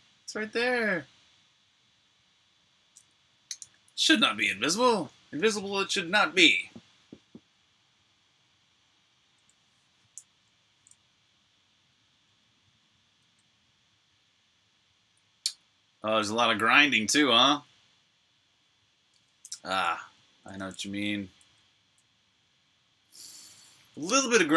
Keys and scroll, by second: 3.5 super+r, 3.7-4.7 typing, 4.7 super+h, 12.2 super+Tab, 12.8 super+Tab, 19.0 super+Tab, 20.2-24.5 typing.